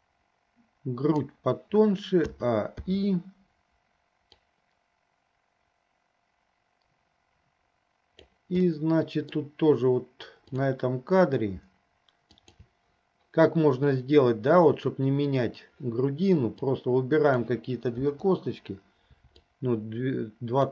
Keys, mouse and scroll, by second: 2.7 a, 3.2 i, 4.7-8.5 drag, 9.2 middle click, 10.8 click, 12.8 shift+drag, 16.8-17.6 drag, 18.3 Delete, 19.9-20.7 drag.